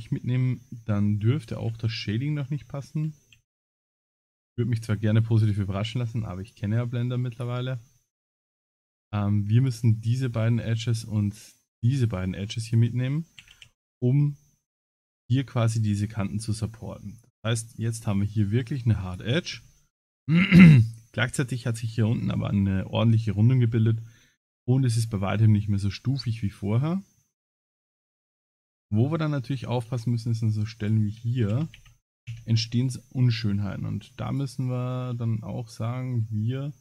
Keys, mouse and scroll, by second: 1.5 shift+e, 1.8 1, 3.3 shift+e, 4.7 click, 6.4 click, 7.6 middle click, 8.5 middle click, 9.6 shift+click, 10.1 middle click, 11.7 shift+click, 12.6 shift+click, 13.4 shift+e, 17.1 click, 17.7 middle click, 18.3 middle click, 19.1 click, 19.6 Tab, 20.3 middle click, 22.6 scroll down 5, 23.3 scroll up 2, 23.7 middle click, 25.6 Tab, 26.5 middle click, 27.8 Tab, 28.2 middle click, 28.7 middle click, 28.7-29.4 scroll up 2, 29.9 Tab, 30.8 click, 31.5 shift+e, 32.3 Tab, 32.8 middle click, 33.4 Tab, 34.3 alt+click, 34.8 middle click.